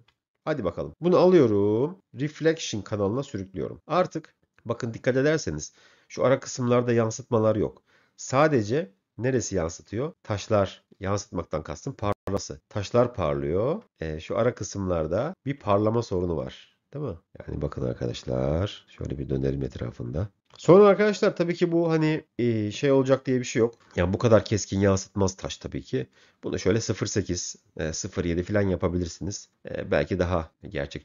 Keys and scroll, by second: 0.5 m.